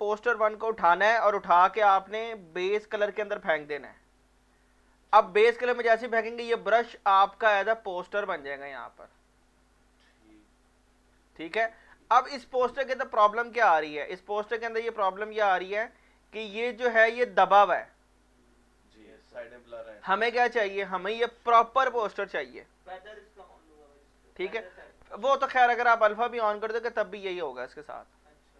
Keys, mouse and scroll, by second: 6.6 ctrl+Num_Lock, 6.6 click, 6.8 ctrl+scroll down 1, 8.2 alt+click, 8.7 alt+right click, 9.4-12.7 alt+drag, 15.0 scroll up 1, 26.1 click.